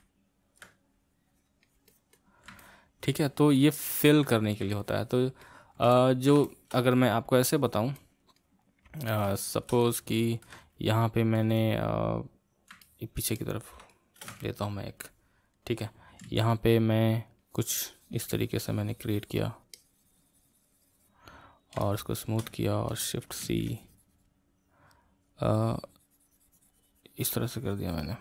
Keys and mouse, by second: 0.0 middle click, 0.8-2.6 drag, 2.6-16.2 middle drag, 16.2 c, 17.4-23.4 drag, 23.4 shift+c, 23.7-28.2 shift+drag.